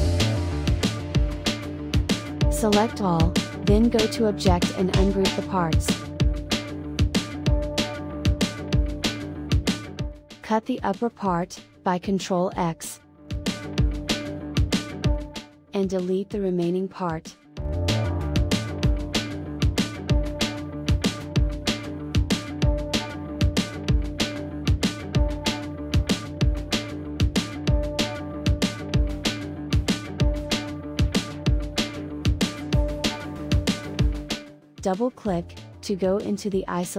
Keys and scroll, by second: 12.3 ctrl+x, 17.2 Delete.